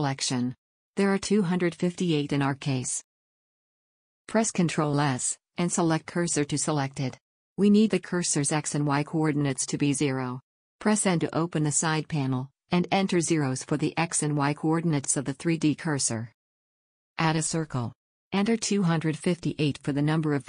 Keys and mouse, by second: 5.6 shift+s, 8.8 n, 16.4 shift+a, 18.8-20.4 drag.